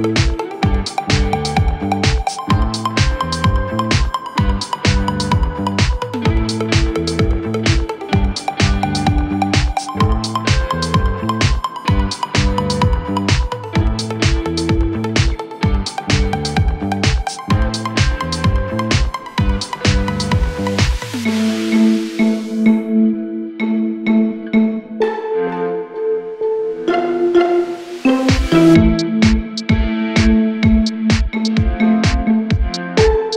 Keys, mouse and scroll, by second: 3.4 ctrl+alt+shift+e.